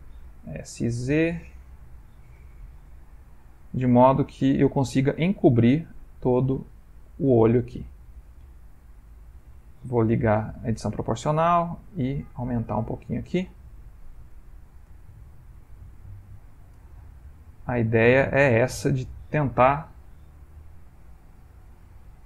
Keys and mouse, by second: 0.4 s, 2.4 g, 6.1 click, 8.5 alt+click, 9.0 s, 10.3 o, 11.2 s, 14.3 space, 14.4 click, 14.9 space, 15.0 space, 15.2 s, 16.7 space, 17.2 s, 20.6 alt+click, 22.1 s.